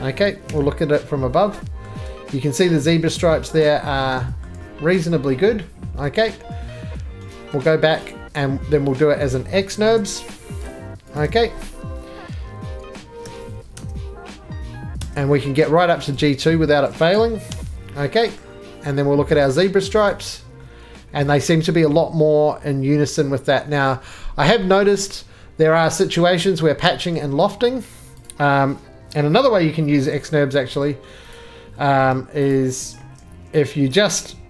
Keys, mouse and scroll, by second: 8.2 shift+middle click, 8.2 right click, 8.2 click, 8.2 scroll up 1, 8.5 scroll down 3, 8.7 3, 8.8-9.2 scroll, 9.2 click, 9.7 x, 10.4 x, 11.1 click, 13.2 alt+v, 13.7 Tab, 14.9 Tab, 16.1 right click, 17.5 j, 18.2 click, 19.4 right click, 20.1 click, 26.2 middle click, 26.5 middle click, 27.0 shift+middle click, 27.1 shift+middle click, 27.9 3, 28.2 click, 30.1 alt+x, 30.1 scroll, 31.3 click, 32.0 Escape, 32.5 click, 33.0 x, 34.3 click.